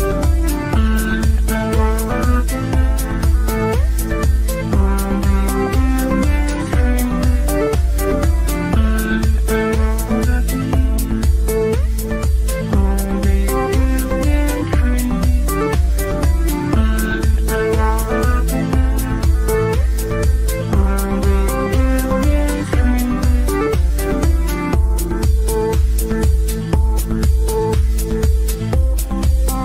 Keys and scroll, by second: 11.3 Delete, 15.3 Delete, 18.1 Delete, 26.0 g.